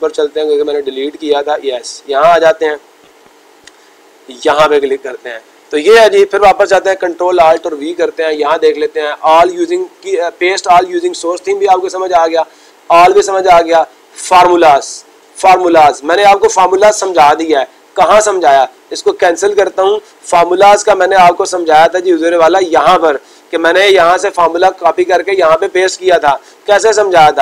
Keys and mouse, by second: 1.1 click, 1.9 click, 2.9 click, 5.2 click, 19.5 click, 21.9-23.0 drag.